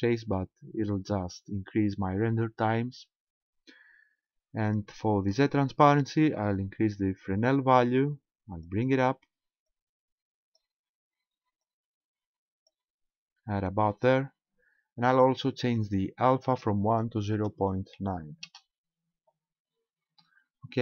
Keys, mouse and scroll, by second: 6.6 click, 9.7 click, 11.6 click, 16.4 click.